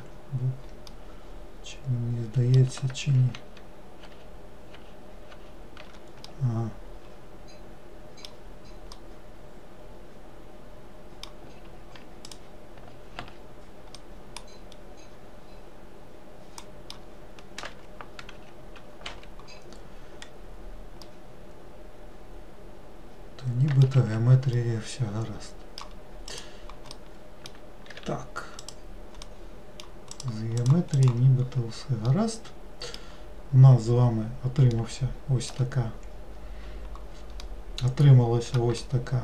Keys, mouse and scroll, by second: 1.1-3.5 middle drag, 3.5 ctrl+z, 4.2 ctrl+z, 6.4-12.1 middle drag, 12.4 click, 14.2-17.2 middle drag, 17.8 Escape, 18.5 z, 19.7-20.4 scroll down 1, 20.4-21.2 scroll up 3, 21.2-24.1 middle drag, 24.1 alt+z, 24.8-26.4 middle drag, 26.4 click, 27.1-28.1 middle drag, 28.1 3, 28.8 click, 29.4 middle click, 30.3 click, 30.8 click, 31.1 click, 31.6 scroll down 2, 32.2-33.3 middle drag, 33.3 scroll down 2, 34.9-39.2 middle drag.